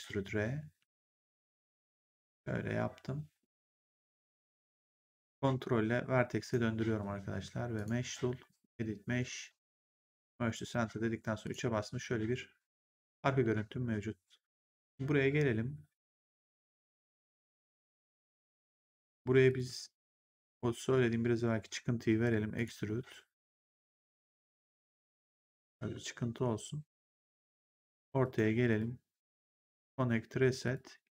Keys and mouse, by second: 1.1 click, 5.1 ctrl+right click, 7.7 click, 9.9 click, 10.4 right click, 11.0 3, 11.3 click, 12.9 click, 13.3 1, 18.3 right click, 19.4 click, 20.0 shift+click, 22.5 click, 25.4 click, 28.1 right click, 28.6 click, 30.9 w.